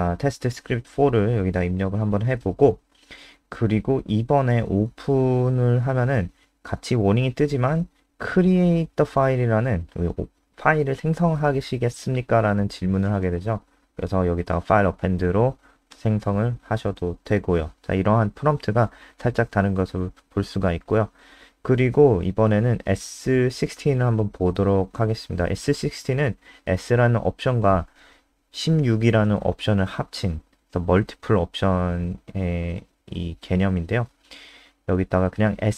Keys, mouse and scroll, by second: 2.0-5.0 typing, 7.0 Return, 12.2 click, 19.6-20.1 scroll down 2, 20.5 click, 21.1 Up, 21.3 End, 21.5-23.1 typing, 23.7 Down, 32.1 Up, 32.4 End, 32.8 BackSpace, 33.0 BackSpace, 34.2 ctrl+s, 34.5 F5.